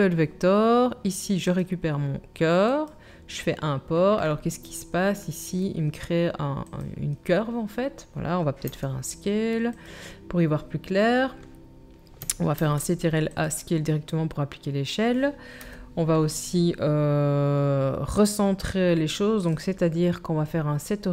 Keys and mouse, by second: 0.1-2.9 middle drag, 5.1-6.8 middle drag, 6.8-19.6 drag, 8.7 s, 12.6 ctrl+a, 15.6 KP_7, 19.6-21.1 middle drag.